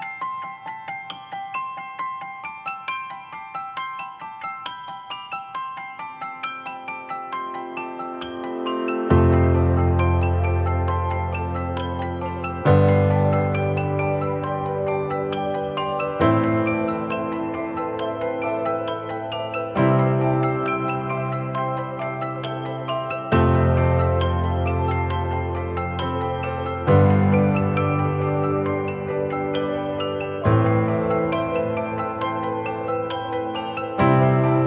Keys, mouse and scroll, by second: 0.1 ctrl+-, 0.9-1.4 typing, 13.4 double click, 14.7 click, 14.9 ctrl+=, 17.0 alt+scroll down 1.